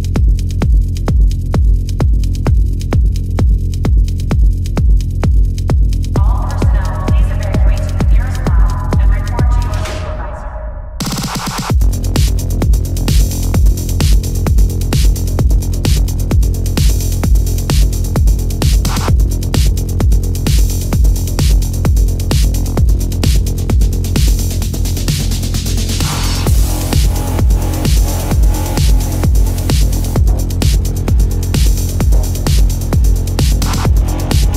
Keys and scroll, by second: 10.3 space, 11.3 ctrl+alt+z, 15.7 ctrl+alt+z, 16.4 ctrl+alt+z, 17.6 ctrl+alt+z, 18.0 ctrl+alt+z, 18.4 ctrl+-, 21.5 space, 28.2 space.